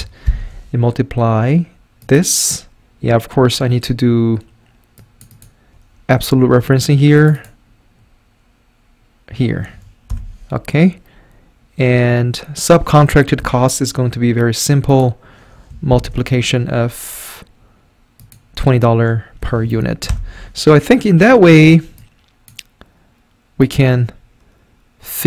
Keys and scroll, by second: 0.3 *, 6.3 F4, 9.3 F4, 10.1 Return, 13.4 =, 15.9 *, 19.4 F4, 20.1 Return.